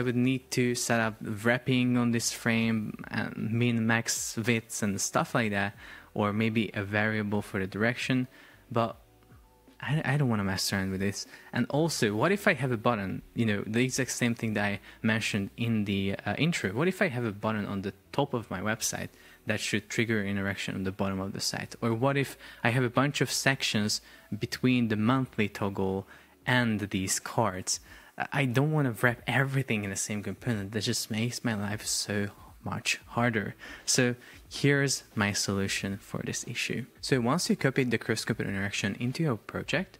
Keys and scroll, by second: 16.8 super+p, 17.5 shift+super+4, 18.9 Escape, 21.6 Escape, 23.3 shift+super+4, 24.2 space, 27.3 Escape.